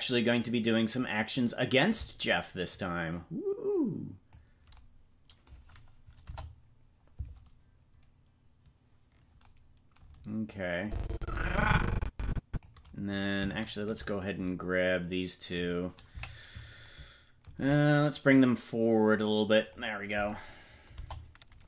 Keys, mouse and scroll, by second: 2.6-4.5 drag, 4.7-6.2 drag, 6.2 KP_0, 10.8-12.6 drag, 13.6 shift+right click, 16.0 KP_Decimal, 18.2-19.7 drag, 20.9 KP_0.